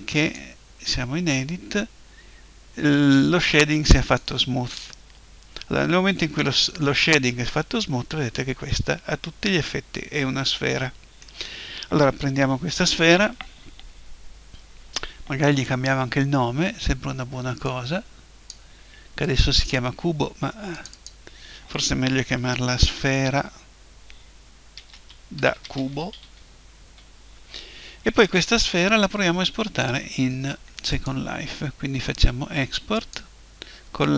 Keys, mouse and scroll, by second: 4.0-5.9 drag, 6.5-8.3 middle drag, 17.7-22.8 drag, 30.9-32.9 drag.